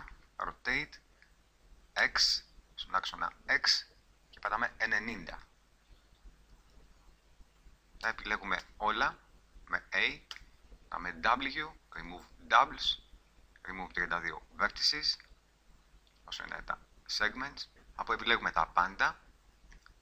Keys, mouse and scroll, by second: 5.4-8.0 drag, 8.0 a, 8.6 a, 10.3 w, 15.4-18.5 middle drag, 18.5 a.